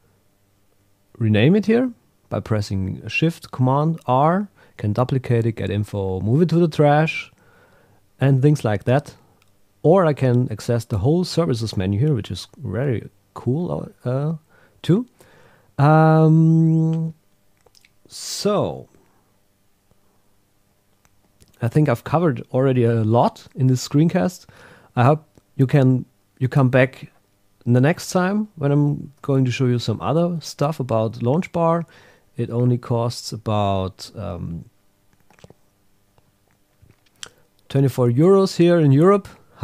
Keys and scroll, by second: 28.0 super+Tab.